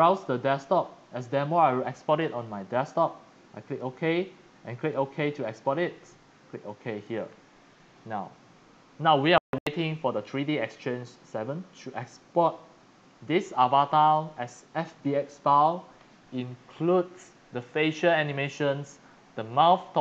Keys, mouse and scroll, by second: 1.2 click, 2.8 click, 4.8 click, 5.4 click, 6.6 click, 12.6 click.